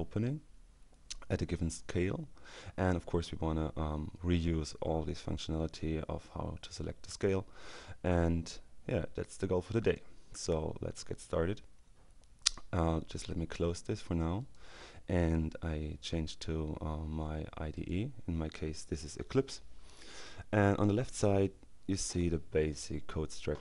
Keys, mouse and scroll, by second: 8.7-10.5 drag, 13.2 click, 14.5 click, 16.5-18.4 drag.